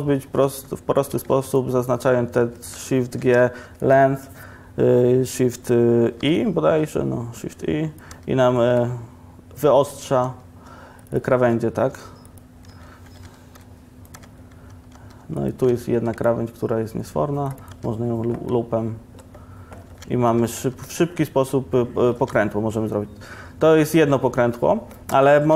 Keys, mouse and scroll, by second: 0.5 2, 3.3 shift+g, 6.3 shift+e, 8.2 Tab, 10.3 Tab, 13.5 shift+e, 14.2 Tab, 15.0 Tab, 16.4 ctrl+r, 17.8 Tab, 20.0 Tab, 20.4 Tab, 20.7 Tab, 25.5 Tab.